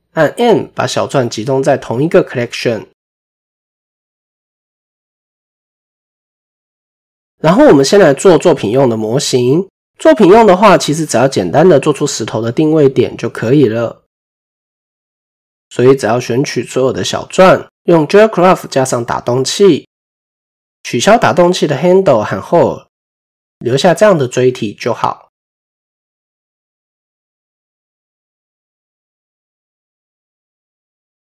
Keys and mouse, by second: 6.6 middle click, 12.0 KP_7, 13.1-13.5 shift+drag, 14.2 drag, 16.6-17.2 drag, 18.8-19.2 drag, 19.4-20.3 middle drag, 21.6 drag, 22.3 click, 23.5-23.8 middle drag, 25.8 click, 26.7-27.9 middle drag, 28.6 click, 29.4 KP_7.